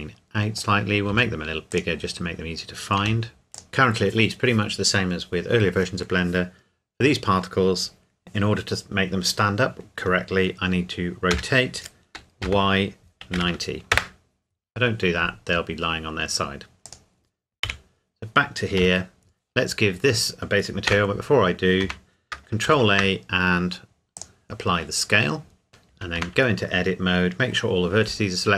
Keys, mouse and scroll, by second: 0.2 middle click, 0.6 scroll down 1, 1.1 s, 1.7 click, 2.0-3.0 scroll down 1, 3.0 g, 3.5 click, 3.7 KP_1, 11.3 r, 12.4 y, 13.3 KP_9, 13.9 KP_Enter, 15.0-15.6 scroll down 1, 15.6-16.9 scroll up 1, 16.9 click, 17.7 KP_Decimal, 18.8 KP_7, 20.9 Tab, 22.7 ctrl+a, 24.2 click, 26.1 Tab.